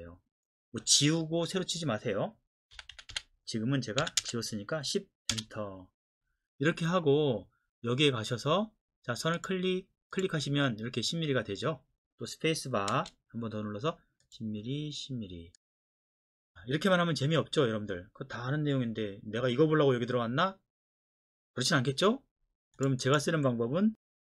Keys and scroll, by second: 2.7-4.2 typing, 5.3 Return, 12.9 space, 22.0 Escape.